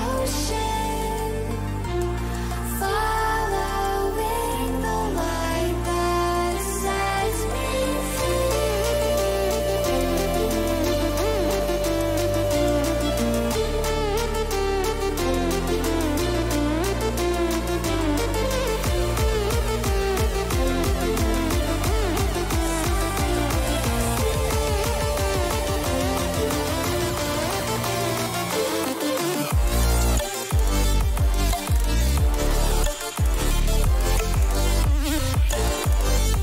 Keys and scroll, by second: 0.4 ctrl+a, 12.5 ctrl+-, 12.8 ctrl+-, 20.3 ctrl+t, 28.9 Return.